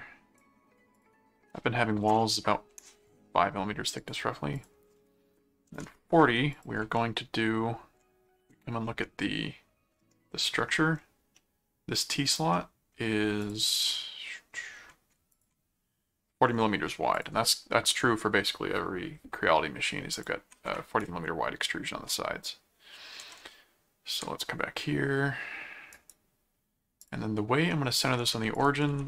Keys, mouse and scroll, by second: 0.9 click, 3.1 right click, 4.0 click, 6.5 ctrl+click, 6.8 ctrl+Tab, 8.0 ctrl+Tab, 11.3 middle click, 12.3 click, 12.5 middle click, 13.4 click, 13.7 middle click, 15.3 ctrl+click, 17.1 click, 20.1 ctrl+click, 21.5 ctrl+Tab, 23.2 ctrl+Tab, 25.9 right click, 27.0 click, 27.9 click, 28.5 alt+click, 28.9 alt+c.